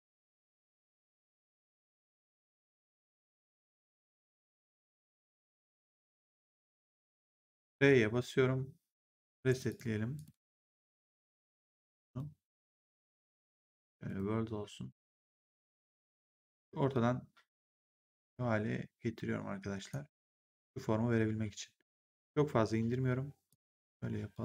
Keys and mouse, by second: 1.8 shift+click, 3.0 shift+click, 7.5 r, 9.2 g, 9.4 click, 14.0 click, 15.3 click, 16.8 click, 23.4 click.